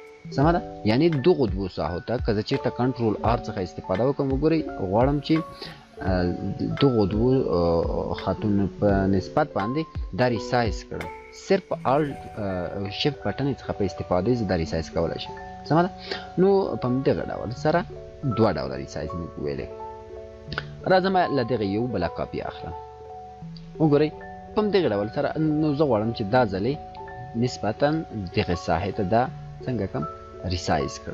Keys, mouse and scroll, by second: 2.6 ctrl+r, 3.6-4.8 click, 11.6-12.8 shift+drag, 15.1 ctrl+z, 16.9-18.1 shift+drag, 21.1-23.2 alt+drag, 27.0-31.1 drag.